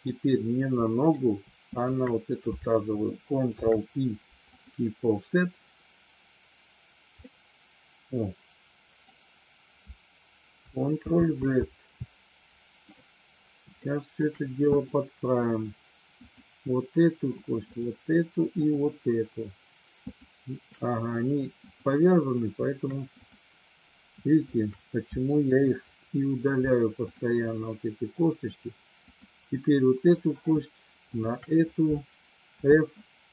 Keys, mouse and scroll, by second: 0.8 middle click, 1.7 shift+click, 3.6 ctrl+p, 7.2-9.0 middle drag, 11.0 ctrl+z, 13.8 shift+middle click, 14.6 click, 16.1 click, 17.7 shift+click, 18.4 shift+click, 20.1 shift+click, 21.7 click, 24.4 shift+click, 25.7 Delete, 29.0 click, 31.1 shift+click, 32.4 f.